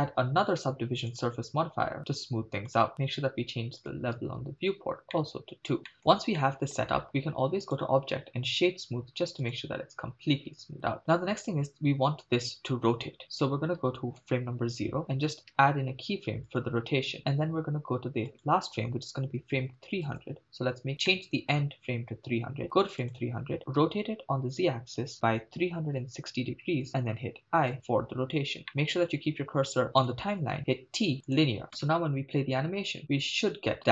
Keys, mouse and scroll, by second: 1.1-2.9 drag, 2.9-3.8 scroll down 2, 3.8 scroll down 1, 3.8-4.9 drag, 5.3-5.8 shift+middle drag, 5.8 scroll down 1, 5.9-6.9 shift+middle drag, 7.7 click, 9.8 drag, 11.0 shift+middle click, 11.5-12.5 drag, 14.2 Left, 15.5 i, 18.3-20.3 drag, 19.7 0, 21.1 middle click, 23.1 click, 23.9 r, 24.4 z, 25.7 3, 26.0 6, 26.2 0, 26.7 Return, 27.1 i, 28.7 middle click, 28.8-29.8 scroll down 3, 29.9 middle click, 30.7 t, 31.7 shift+space, 32.7-33.7 scroll down 2.